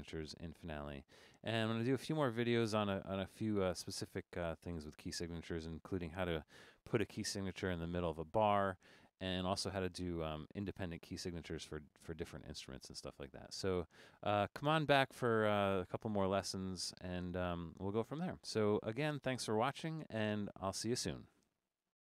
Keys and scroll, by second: 17.5-18.2 typing.